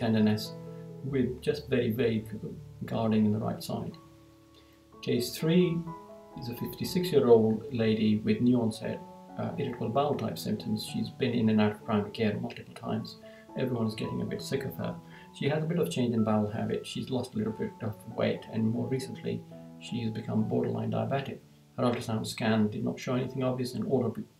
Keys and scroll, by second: 3.7 Right.